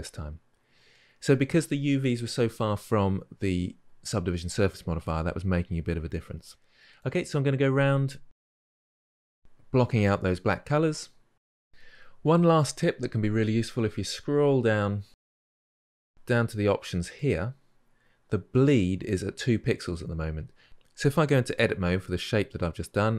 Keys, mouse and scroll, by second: 7.5 click, 8.3 drag, 8.4 scroll down 3, 8.5-9.4 shift+middle drag, 9.4-9.7 scroll up 3, 9.7 alt+click, 10.3 drag, 10.5-13.5 scroll down 4, 21.3 Tab.